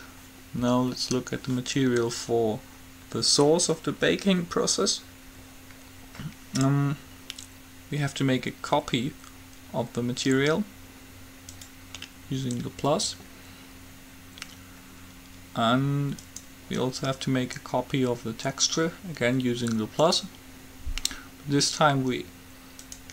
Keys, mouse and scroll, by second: 11.8-13.3 drag, 16.4-18.0 drag, 20.3-22.0 drag, 23.0-23.1 drag.